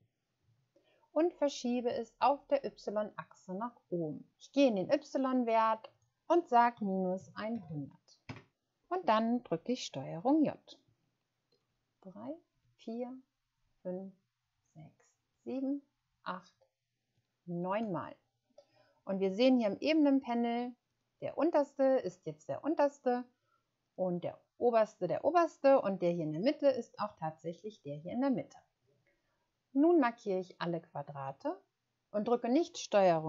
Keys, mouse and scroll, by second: 5.3 click, 7.1-7.6 typing, 8.2 Return, 11.6 ctrl+j, 12.5 ctrl+j, 13.5 ctrl+j, 14.4 ctrl+j, 15.2 ctrl+j, 16.0 ctrl+j, 17.0 ctrl+j, 18.9 scroll down 1, 20.0-20.3 scroll down 1, 20.5-20.8 scroll down 1, 21.0 scroll down 1.